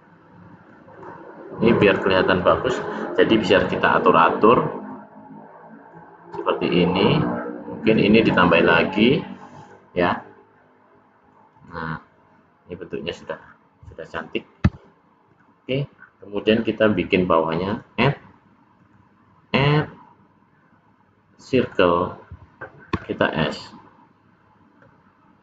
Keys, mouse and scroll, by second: 0.8 click, 1.6 click, 1.8 click, 2.3 click, 3.8 click, 4.0 click, 4.8 click, 6.2 click, 7.7 click, 9.5 click, 10.9 middle click, 11.4 click, 11.9 middle click, 13.4-14.0 scroll down 2, 14.0-14.5 scroll down 2, 15.9 scroll up 1, 15.9-16.8 scroll down 6, 17.6 click, 22.8 s.